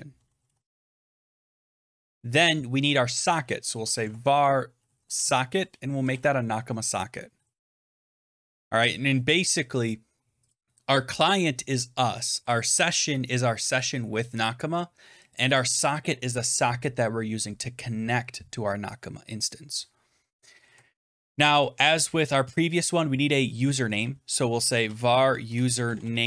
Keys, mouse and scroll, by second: 0.0-1.3 typing, 1.4 Tab, 1.8 Return, 3.3-8.5 typing, 10.4 click, 10.5 click, 12.3 click, 12.5 click, 15.2 click, 15.3 click, 20.5 Right, 21.4 Return, 24.2-26.2 typing.